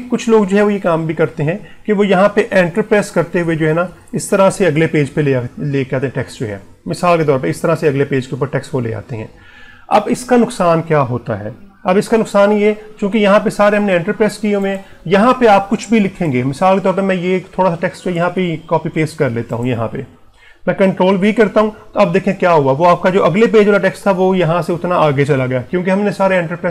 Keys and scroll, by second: 18.9 ctrl+c, 20.8 ctrl+v.